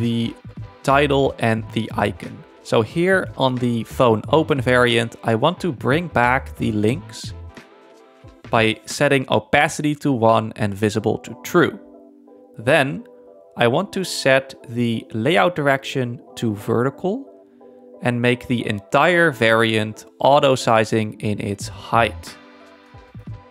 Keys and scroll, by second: 17.3 z.